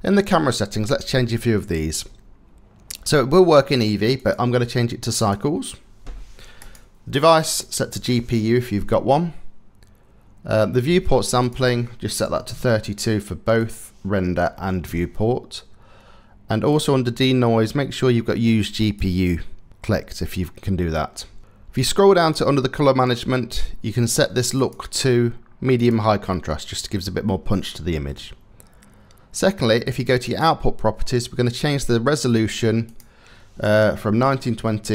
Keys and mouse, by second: 3.8-5.0 drag, 6.2-7.3 drag, 11.0-12.1 drag, 13.3-14.5 drag, 16.4 click, 18.4 click, 21.8 click, 24.2-25.6 drag, 29.8 click, 32.5-34.9 drag.